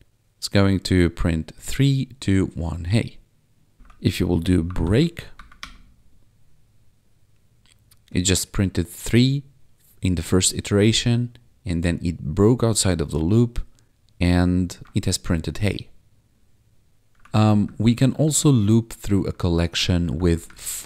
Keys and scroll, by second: 3.7 ctrl+s, 4.8 ctrl+`, 5.3 Up, 5.6 Return, 14.8 ctrl+`, 17.1 ctrl+Down, 19.2 ctrl+Left, 20.0 Down, 20.1 Left.